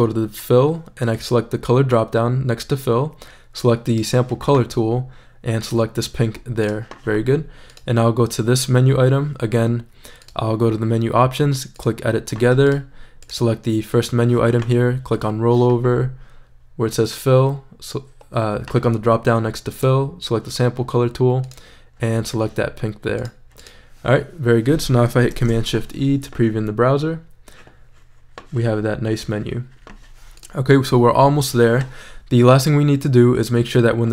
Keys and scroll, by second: 25.3 shift+super+e.